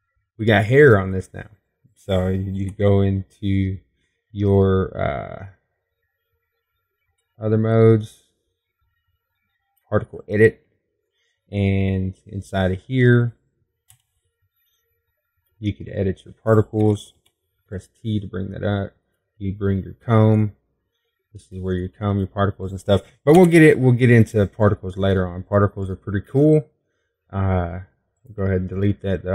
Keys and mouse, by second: 0.5-3.5 middle drag, 5.1 Tab, 15.8 middle click, 16.5 KP_0, 17.2 middle click, 18.2 click, 19.7 t, 26.0 Tab.